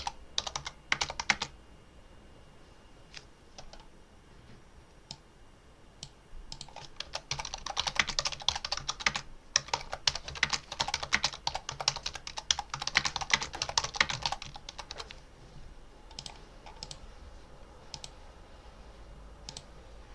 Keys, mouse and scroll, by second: 0.0-1.1 typing, 4.9 click, 6.4 click, 6.7-15.2 typing, 16.1 click, 16.7 click, 17.8 click, 19.3 click.